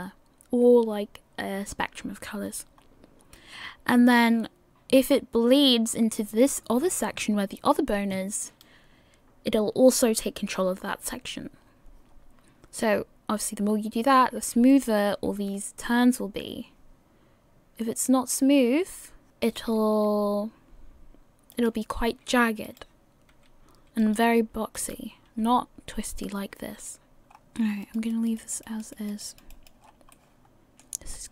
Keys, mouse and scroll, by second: 2.8-3.6 scroll down 4, 8.8 right click, 12.1 scroll down 3, 15.0 right click, 15.2 r, 19.8 right click, 20.1 r, 22.9 right click, 23.3 r, 25.0 right click, 25.3 r, 27.2 middle click, 27.2 right click, 27.2 scroll down 6, 27.3-27.8 scroll up 3, 27.8 click, 28.1 click, 28.9 click, 29.5 click, 29.8 scroll down 6, 30.1 middle click, 31.1 scroll up 2.